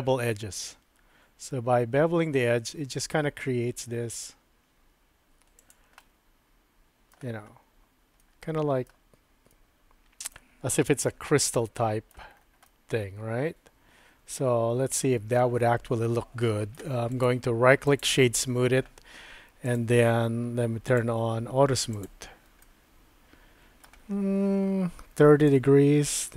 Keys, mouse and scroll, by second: 6.1-7.2 middle drag, 8.3 middle click, 9.6 middle click, 11.3 Tab, 11.3 typing, 11.6-12.1 middle drag, 12.7-16.8 middle drag, 17.1 right click, 19.7 click, 20.9 click, 21.9 click, 22.6-23.8 middle drag, 25.6-26.3 drag.